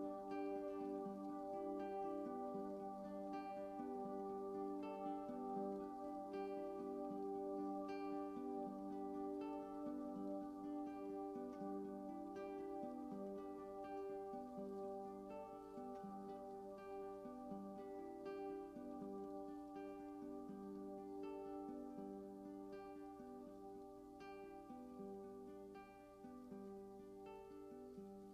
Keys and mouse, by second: 0.5 a, 0.9 alt+r, 1.3 alt+g, 2.3-4.3 drag, 4.3 Tab, 5.1-10.2 alt+drag, 9.2 Tab, 10.2 ctrl+alt+middle click, 10.5-12.0 ctrl+alt+drag, 12.0 ctrl+alt+middle click, 12.8 alt+click, 13.1 ctrl+alt+middle click, 13.5-16.7 ctrl+alt+drag, 17.5 ctrl+s, 22.8 super+d, 24.8-28.3 typing.